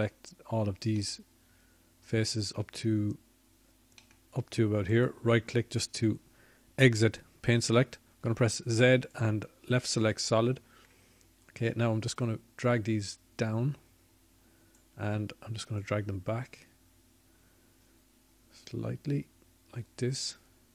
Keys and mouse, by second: 15.1 z, 18.6-20.3 drag.